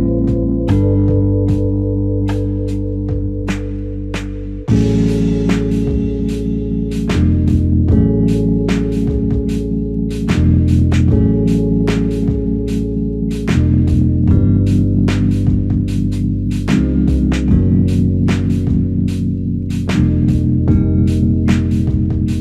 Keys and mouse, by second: 1.8 double click, 4.6 double click, 22.2 double click.